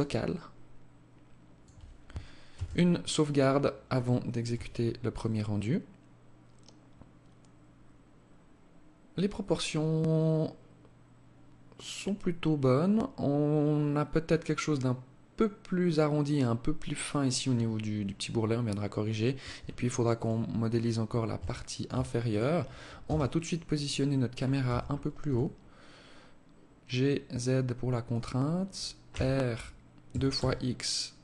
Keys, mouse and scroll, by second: 1.8 ctrl+s, 18.7 Escape, 19.5 right click, 20.0 scroll up 4, 20.3 scroll down 1, 20.9 alt+shift+click, 21.6 right click, 22.3 KP_0, 23.9 g, 28.4 r.